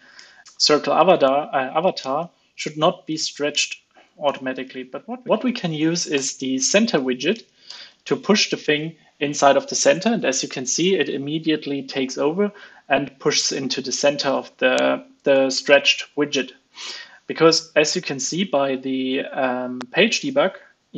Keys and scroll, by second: 2.5 super+Right, 4.2 alt+Return, 6.1 alt+Return, 7.9 super+s, 8.4 alt+super+l, 8.6 super+s, 16.0 super+s.